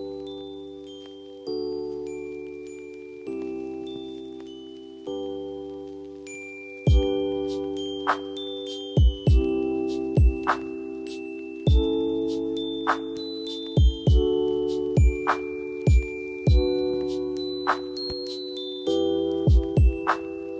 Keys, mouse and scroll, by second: 4.9-7.1 drag, 12.8-17.2 drag, 17.6 space, 18.1-19.9 drag, 19.9 F2, 20.2-20.5 drag.